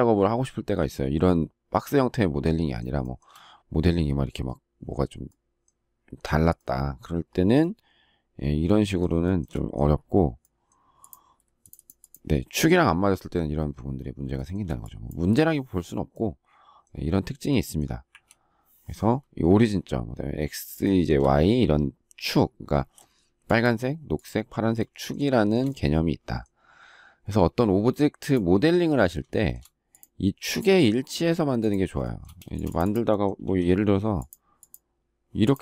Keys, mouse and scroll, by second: 3.0 shift+middle click, 9.2 shift+middle click, 14.3 shift+middle click, 18.1 Delete, 20.8 shift+middle click, 25.3 shift+middle click, 29.3 shift+middle click, 32.0 shift+middle click, 32.4 space, 33.4 q.